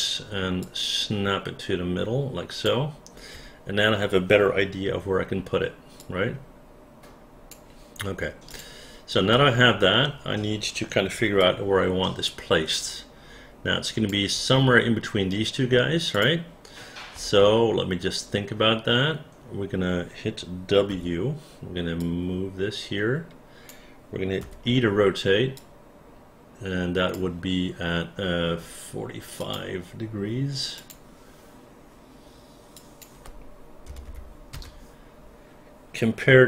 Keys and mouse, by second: 0.6-2.6 drag, 0.6 x, 4.8 r, 6.0-7.5 drag, 8.5 click, 9.3 space, 11.4-14.0 alt+drag, 16.1 click, 17.1 space, 20.9 w, 22.0-23.6 drag, 24.4 e, 25.6-27.1 drag, 32.7 click, 33.8 KP_4, 34.0 KP_5, 34.5 Return.